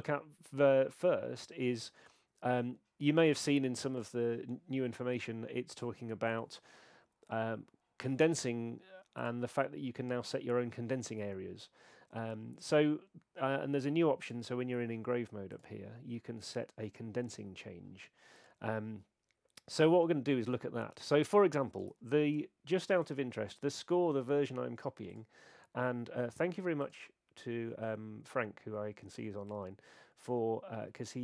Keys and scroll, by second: 21.9 super+Tab, 22.9 super+Tab, 23.0 super+Tab.